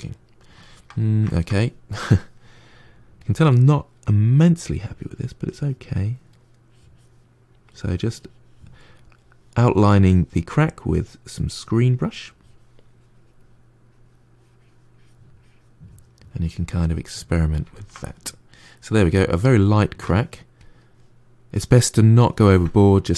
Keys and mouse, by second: 1.8-3.4 drag, 3.4-4.7 middle drag, 4.7-8.8 drag, 8.8-10.7 middle drag, 10.7-17.6 drag, 17.6-20.5 ctrl+middle drag, 20.5-21.8 drag, 21.8-23.1 middle drag.